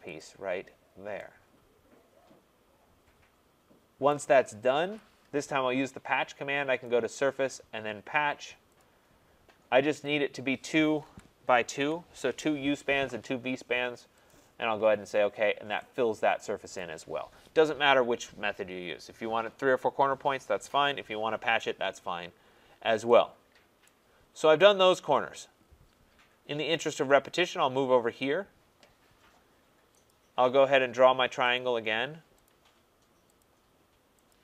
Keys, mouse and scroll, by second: 0.2 click, 0.8 middle click, 4.1 right click, 4.7 Return, 6.8 click, 8.8 click, 10.3 click, 11.0-11.7 typing, 14.3 click, 15.4 middle click, 16.8 right click, 17.8-19.3 scroll, 21.7-23.1 scroll, 23.8 right click, 25.5-25.9 scroll, 26.2-28.9 scroll, 30.1 click, 31.5 click, 32.4 click, 33.4 click, 34.3 click.